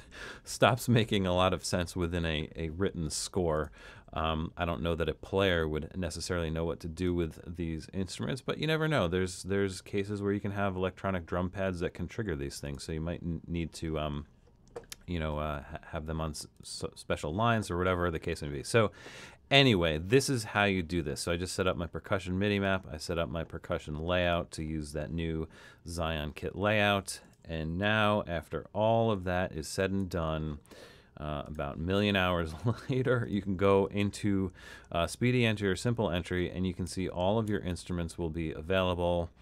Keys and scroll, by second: 28.1 super+=, 28.4 super+=, 29.2 super+=, 34.7 Down, 35.2 Down, 35.5 Down, 36.0 Down, 36.4 Down, 37.5 Down, 39.3 Down.